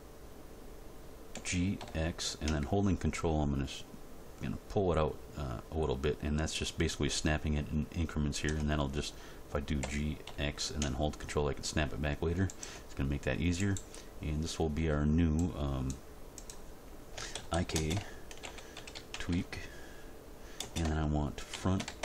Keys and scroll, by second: 1.4 g, 1.8 x, 9.8 g, 10.2 x, 17.3-19.3 typing, 20.6 space, 21.5 shift+f.